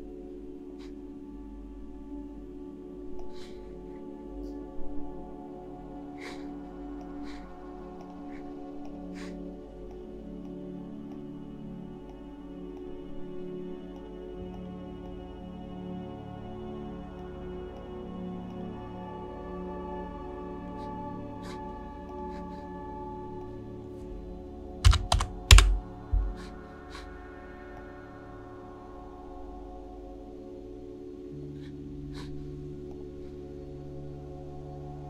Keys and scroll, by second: 24.9 typing, 25.6 Return.